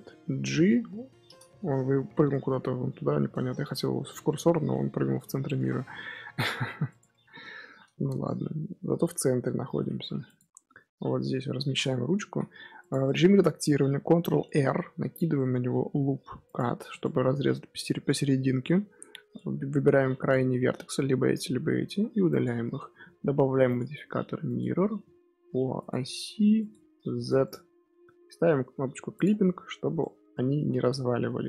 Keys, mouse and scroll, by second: 0.3 alt+g, 1.0-2.7 scroll down 1, 2.7-3.2 scroll up 4, 3.2-4.1 scroll down 4, 4.1-5.4 scroll down 1, 5.4 g, 7.0-7.8 middle drag, 7.8 z, 8.0-8.3 middle drag, 8.3-8.8 scroll up 1, 8.8 g, 10.7 KP_3, 11.1 KP_1, 11.6 scroll up 4, 11.9 scroll down 1, 11.9 Tab, 12.1 z, 14.5 ctrl+r, 17.6 scroll down 1, 17.7-18.4 scroll up 1, 18.4 scroll down 1, 18.4-19.3 scroll up 1, 19.3 click, 21.8 x, 22.7 Tab, 24.5-25.8 drag, 26.5 click, 27.1 drag, 29.1 click, 30.2 Tab, 30.4 a, 30.8 g.